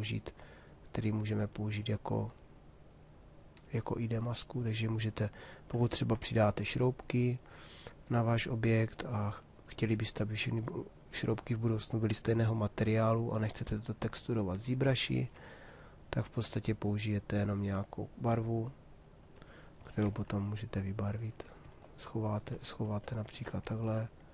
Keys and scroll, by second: 19.7 shift+f.